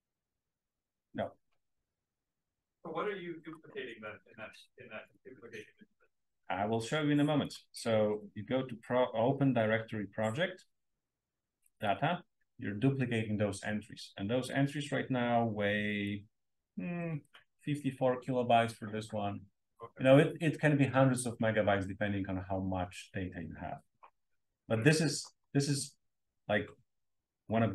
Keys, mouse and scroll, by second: 2.7 click, 7.3 click, 8.0 right click, 9.9 click.